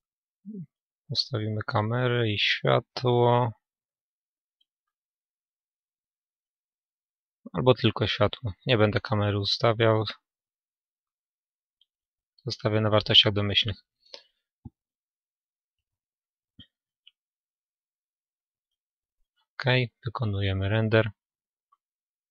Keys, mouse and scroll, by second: 4.2-5.8 right drag, 5.3-7.0 drag, 7.8-9.7 middle drag, 9.3-11.3 drag, 11.1-12.7 middle drag, 14.3-16.2 middle drag, 19.9-22.3 drag.